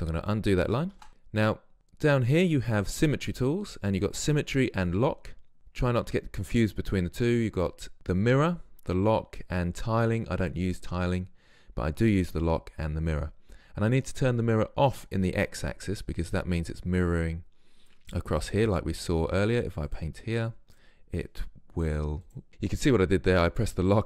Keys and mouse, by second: 1.1 ctrl+z, 15.0-22.5 drag.